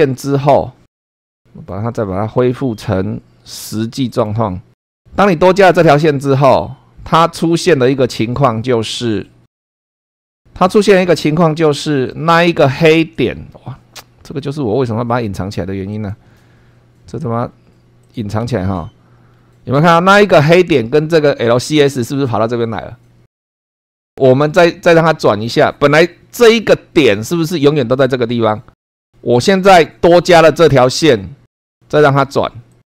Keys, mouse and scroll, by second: 4.1 click, 4.7 click, 6.2 click, 7.3 middle click, 8.9 scroll down 2, 9.9 click, 10.1 shift+middle click, 10.7 shift+middle click, 11.7-14.6 shift+middle drag, 15.9 click, 17.2 scroll up 1, 18.0 click, 18.4 space, 19.3 scroll up 1, 24.3-24.8 scroll down 2, 31.6 click, 32.7 click.